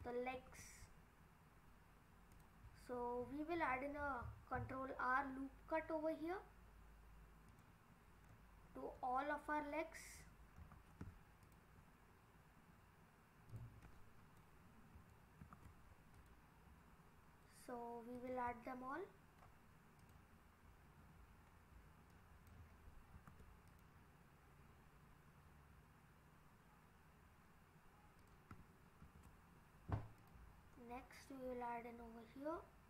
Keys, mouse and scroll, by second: 0.3 ctrl+r, 8.3 middle click, 8.4-9.3 scroll down 7, 9.4-10.6 scroll up 1, 10.6 ctrl+r, 10.6 scroll up 1, 13.8 middle click, 15.4 ctrl+r, 18.5-20.0 scroll down 2, 20.0 click, 20.7-21.6 scroll up 2, 22.1 click, 23.1 ctrl+r, 29.0 ctrl+r.